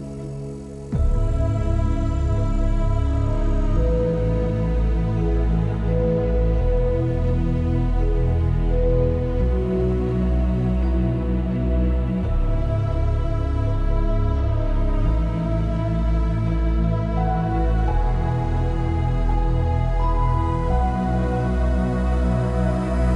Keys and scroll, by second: 13.4 F9, 15.6 F9.